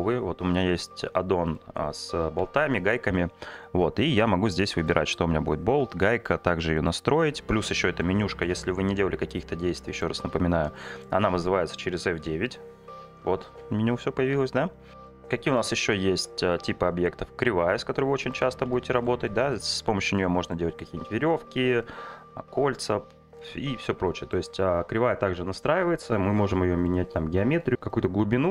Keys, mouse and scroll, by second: 2.4 KP_Decimal, 4.1-4.9 drag, 6.1-6.9 drag, 10.0 click, 12.2 F9, 14.9 Tab, 15.8 shift+a, 20.8 Tab, 21.2 click, 22.5 g, 23.3 click, 23.8 ctrl+z, 25.6 click, 26.8 click, 28.0-28.5 drag.